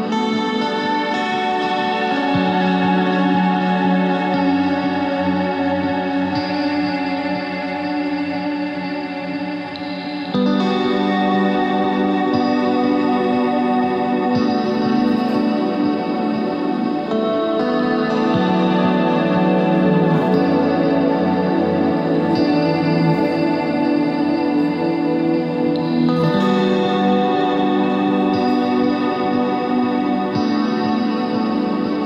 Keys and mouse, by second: 2.0-5.5 middle drag, 6.3 KP_3, 6.9 KP_1, 9.2 z, 9.9 z, 11.1 Tab, 12.3 ctrl+Tab, 13.2 z, 13.5 c, 16.7 z, 17.4 s, 19.4 Tab, 20.9 click, 22.1 s, 23.5 s, 25.1 click, 26.5 Tab, 27.2 ctrl+r.